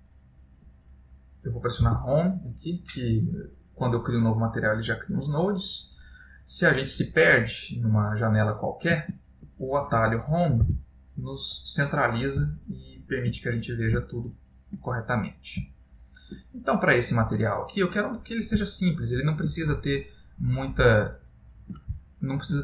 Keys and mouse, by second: 1.9 Home, 3.2 middle click, 5.5 middle click, 7.2 middle click, 7.7 middle click, 10.8 Home, 12.6 ctrl+middle click, 13.7 middle click, 14.2 ctrl+middle click, 15.2 middle click, 15.8 ctrl+middle click, 16.7 middle click, 18.9 shift+middle click, 20.0 ctrl+middle click, 21.2 ctrl+middle click, 21.7 shift+middle click, 22.1 shift+middle click.